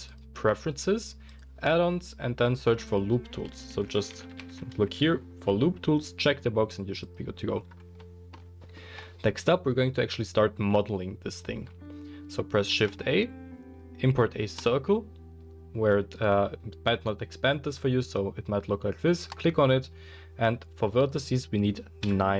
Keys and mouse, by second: 12.7 shift+a.